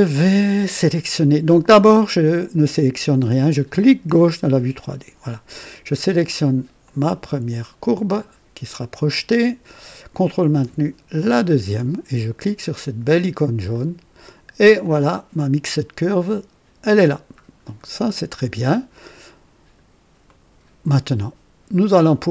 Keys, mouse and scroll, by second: 4.0 click, 6.8 click, 11.1 ctrl+click, 13.6 click, 14.8-16.3 drag, 17.3 scroll down 2, 17.9 scroll up 2, 18.5-19.9 drag, 20.2 right click, 20.8-22.3 drag.